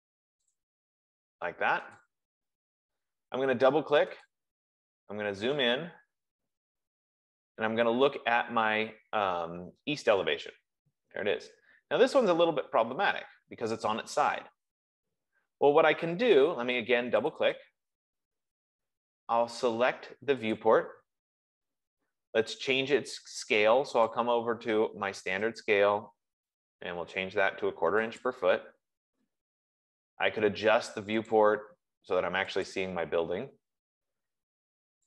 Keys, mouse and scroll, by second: 0.7 click, 2.4 click, 4.3 click, 4.7 click, 4.8 F15, 6.0-7.0 scroll, 7.1 scroll, 7.4 middle click, 7.6 middle click, 8.9 middle click, 11.0 middle click, 11.4 middle click, 17.6 click, 17.9 click, 20.9 click, 24.5 click, 25.8 click, 28.6 click, 31.6 click, 33.0 click.